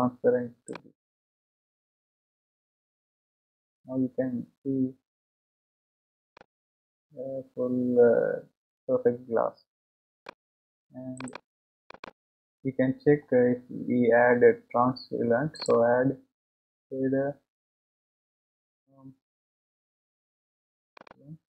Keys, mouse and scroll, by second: 0.7-2.1 drag, 3.2-5.0 scroll down 1, 5.0-6.4 scroll up 1, 6.4 scroll up 1, 6.6-9.6 middle drag, 11.9-21.0 drag.